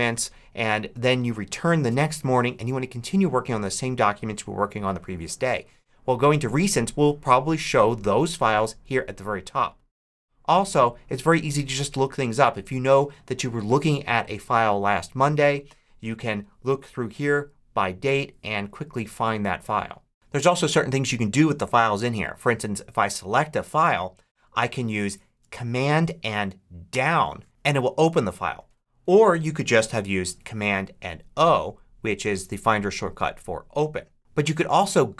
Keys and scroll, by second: 26.8 super+Down.